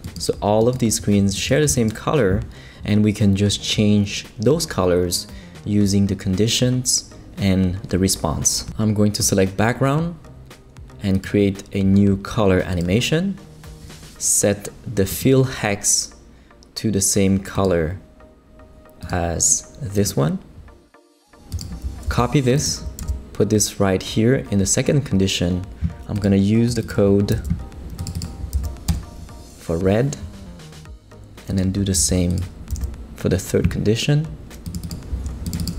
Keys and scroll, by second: 22.0 super+c, 23.0 super+v, 27.3 super+c, 28.5 super+v, 28.9 super+Return, 29.6 Return, 31.3 typing, 32.0 super+c, 32.7 super+v.